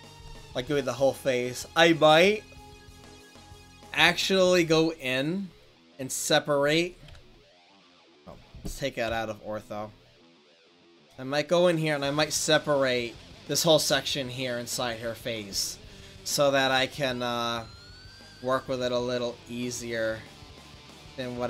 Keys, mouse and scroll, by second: 4.5 right click, 4.8 middle click, 5.8 click, 9.1 KP_5, 19.5 middle click.